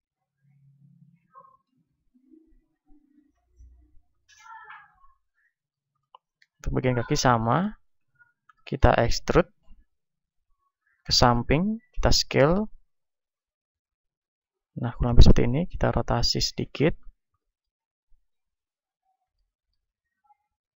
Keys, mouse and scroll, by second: 1.8 right click, 2.8 s, 3.7-5.7 drag, 4.7 ctrl+Tab, 5.7-6.8 middle drag, 5.7 z, 6.8 click, 7.7-9.9 middle drag, 8.1 KP_1, 9.9 e, 11.4-15.2 drag, 12.0 s, 15.2-16.5 middle drag, 15.2 r, 16.5-19.0 drag, 18.6 right click, 19.0-20.7 middle drag.